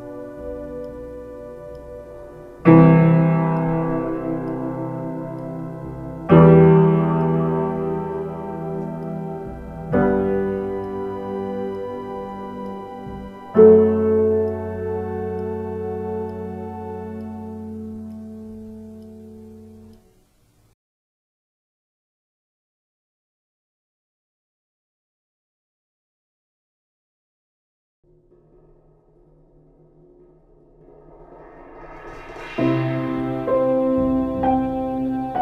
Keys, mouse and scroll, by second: 6.3 ctrl+space, 8.4 ctrl+space, 14.9 ctrl+space, 16.4 ctrl+z, 17.0 ctrl+shift+z, 17.7 ctrl+space, 18.2 space, 18.9 ctrl+space, 20.0 ctrl+;, 21.0 ctrl+;.